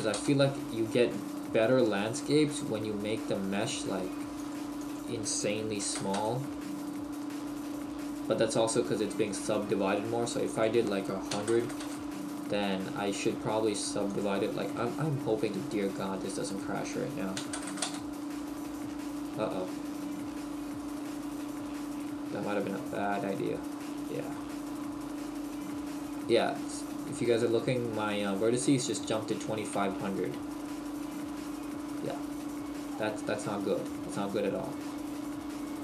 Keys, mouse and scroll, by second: 1.2-1.7 scroll up 1, 1.7-2.0 scroll up 2, 2.0 shift+middle click, 2.5 scroll down 1, 2.7-3.2 scroll up 1, 4.4 click, 7.5-8.6 scroll up 1, 8.6 middle click, 8.6-9.6 scroll up 1, 10.5 click, 12.7-13.3 scroll down 1, 14.1 click, 24.4 middle click, 24.9 scroll down 1, 30.0 middle click, 34.3 Tab, 34.3 middle click, 35.3 middle click.